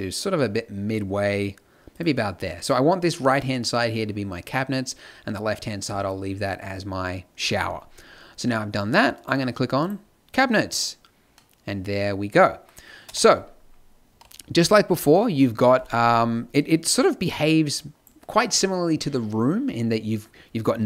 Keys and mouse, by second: 1.9-8.0 middle drag, 8.7-9.9 drag, 10.8 click, 13.0 KP_0, 14.0 z.